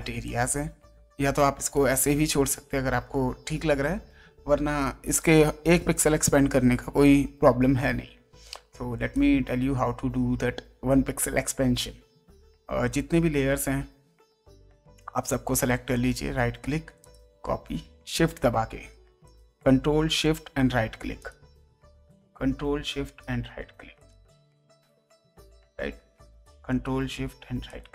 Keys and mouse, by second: 0.2 click, 1.3 ctrl+space, 1.7 click, 8.8 space, 9.1 click, 15.9 ctrl+right click, 17.0 ctrl+click, 18.2 ctrl+shift+right click, 19.2 ctrl+shift+click, 20.2 ctrl+shift+right click, 21.2 ctrl+shift+click, 23.0 ctrl+shift+right click, 24.0 ctrl+shift+click, 24.5 space, 24.8 click, 26.7 ctrl+shift+right click, 27.6 ctrl+shift+click.